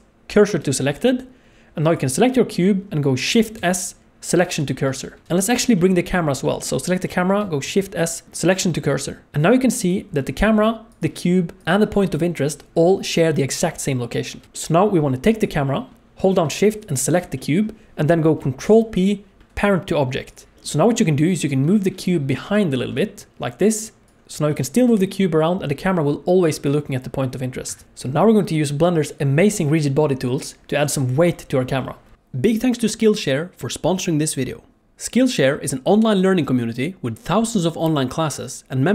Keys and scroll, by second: 3.5 shift+s, 7.6 shift+s, 18.6 ctrl+p, 22.4 g, 24.2 alt+a, 24.8 g.